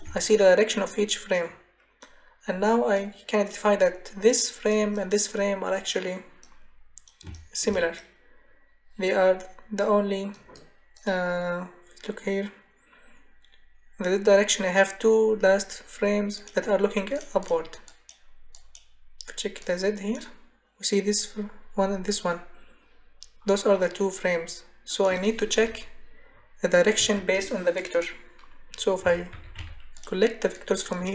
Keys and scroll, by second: 27.0 Delete, 28.8-30.0 typing.